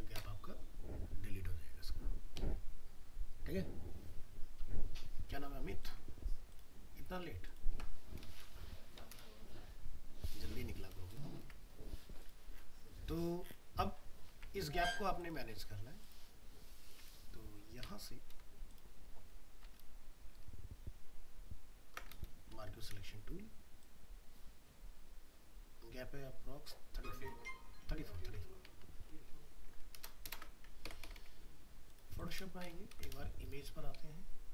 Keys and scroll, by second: 11.5 alt+Tab, 18.4 ctrl+space, 28.2 ctrl+d, 30.9 ctrl+alt+0.